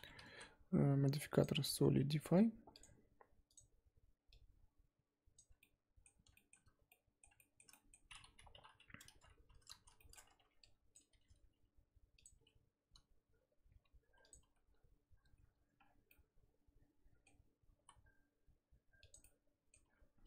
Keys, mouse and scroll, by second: 0.3 z, 3.5-5.6 drag, 5.6-8.5 middle drag, 8.5 KP_3, 9.5 Tab, 9.7 z, 10.0 shift+middle click, 10.4 1, 10.9 click, 11.1 r, 12.4 g, 14.5 z, 15.8 scroll down 4, 16.1-17.7 middle drag, 17.7 s, 19.2 middle click, 19.8 Tab.